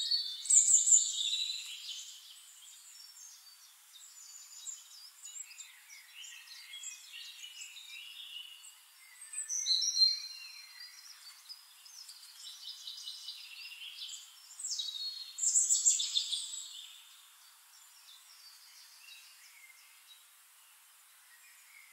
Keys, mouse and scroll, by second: 0.1 click, 1.1 middle click, 1.7 ctrl+click, 2.3 ctrl+click, 3.1 ctrl+z, 3.7 click, 3.9 click, 5.1 ctrl+d, 5.5 click, 6.3 ctrl+click, 6.7 ctrl+click, 7.9 ctrl+click, 8.4 click, 8.9 click, 9.2 click, 10.0 click, 10.5 click, 11.2 drag, 11.6 click, 12.3 shift+-, 12.5 click, 13.1 click, 13.8 click, 14.9 click, 15.2 click, 15.8 click, 16.1 click, 16.8 click, 18.5 click, 20.4 click.